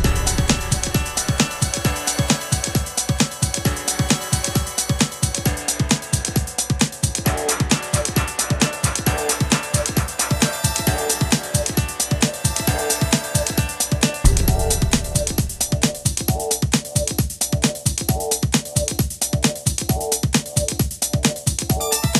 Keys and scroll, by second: 7.6 super+d, 10.5 super+d, 13.0 Left, 13.3 Right, 15.5 super+c, 15.5 super+v.